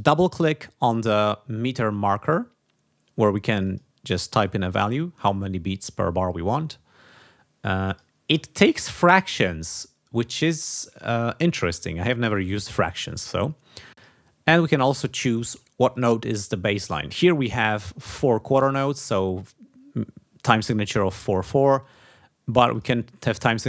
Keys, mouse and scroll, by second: 3.6 click, 4.4 click, 7.8 click, 13.9 click, 15.9 click, 21.7 click, 22.7 click.